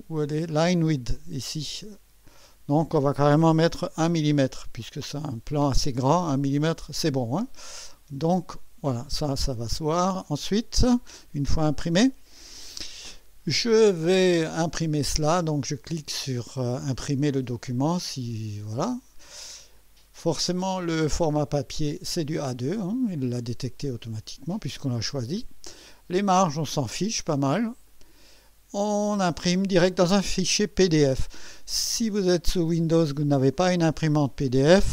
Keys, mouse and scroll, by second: 0.2 scroll down 1, 2.2 click, 3.9 1, 18.7 click, 20.8 click, 27.9 click.